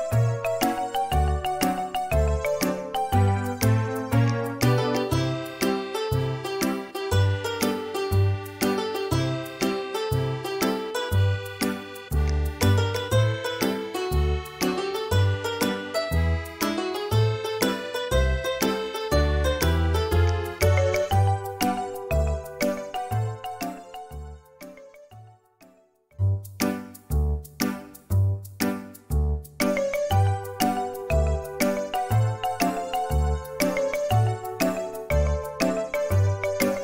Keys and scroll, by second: 3.7 space, 14.4 4, 18.5 typing, 19.8-22.5 typing, 28.1 Escape, 28.1 space.